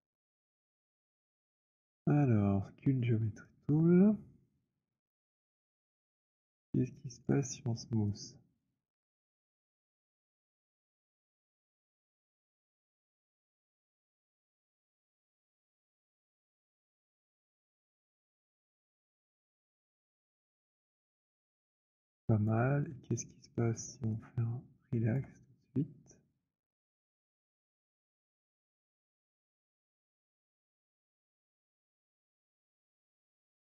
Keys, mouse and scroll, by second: 3.3 click, 6.9 alt+click, 8.4 shift+click, 10.4 alt+click, 10.4 z, 12.2 alt+click, 12.7 shift+click, 13.9 shift+click, 15.7 alt+click, 16.2 shift+click, 18.6 alt+click, 19.5 z, 20.1 z, 20.7 z, 22.6 alt+click, 25.1 alt+click, 28.6 click, 30.6 alt+click, 32.1 click, 33.4 alt+click.